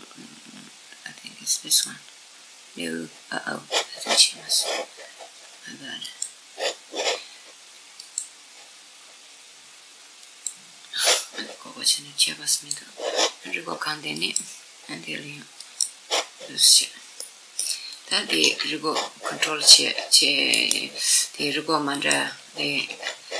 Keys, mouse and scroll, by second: 5.7 click, 7.7 click, 12.2-15.6 drag, 16.4-18.7 middle drag, 17.6 click, 18.1 r, 20.3 right click, 20.8-22.8 middle drag, 21.6 click, 22.6 r, 23.1 middle click.